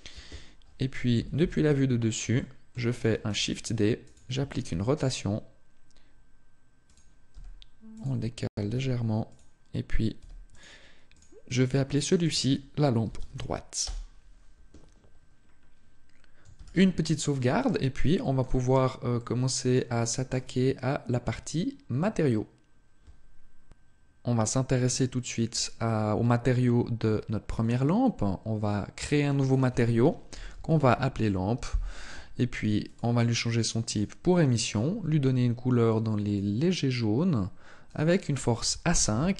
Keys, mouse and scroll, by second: 1.0 KP_7, 2.2 shift+middle click, 3.1 shift+d, 3.9 click, 4.3 r, 6.8 click, 7.1 g, 7.9 click, 8.3 r, 9.1 click, 10.0 g, 10.3 click, 11.0 click, 15.1-16.3 scroll down 2, 16.3 ctrl+s, 17.4 shift+middle click, 18.5-18.9 scroll down 1, 18.9 middle click, 19.7 shift+middle click, 20.3 scroll up 1.